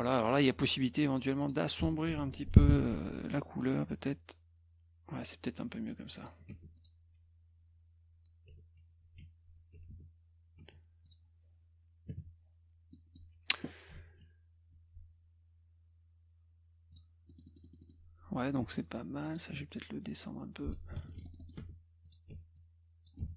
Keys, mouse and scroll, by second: 0.1 click, 1.4 click, 2.5 ctrl+shift+f, 4.1 click, 6.4 click, 6.5 F1, 6.8 click, 9.0 ctrl+s, 9.6 F1, 9.9 F2, 10.6 F1, 11.1 click, 12.9 middle click, 14.0 ctrl+s, 16.9 click, 17.3-18.0 scroll up 8, 18.6 F2, 19.3 click, 19.5 F1, 20.1-20.7 drag, 21.0 ctrl+z, 21.1 ctrl+middle click, 21.2 middle click, 21.2 scroll up 3, 21.4 middle click, 21.6 F2, 22.1 click, 22.3 F1, 22.6 click, 23.2 F1.